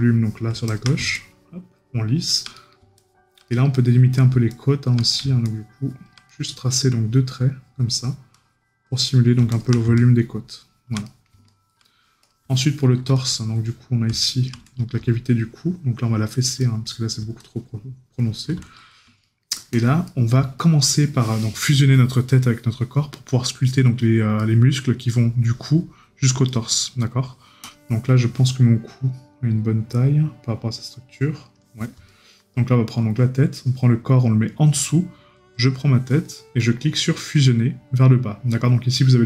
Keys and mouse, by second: 2.5 right click, 5.0 right click, 6.3 right click, 11.1 right click, 12.6 right click, 14.2 right click, 16.6 right click, 19.2 right click, 24.4 right click, 26.5 right click, 32.1 right click.